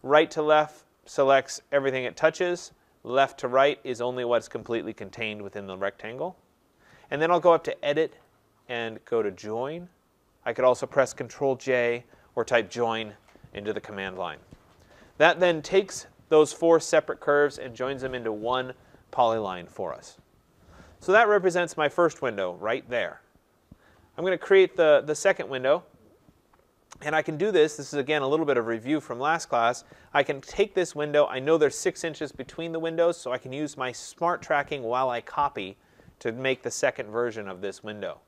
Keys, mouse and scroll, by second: 1.6 click, 2.7 click, 4.2 click, 8.3 click, 12.8 click, 15.4 click, 16.6 click, 21.5-23.6 scroll, 24.1-26.7 scroll, 26.7 scroll, 28.1-28.9 scroll, 28.9 scroll, 29.0 click, 30.1 click, 30.7-33.4 scroll.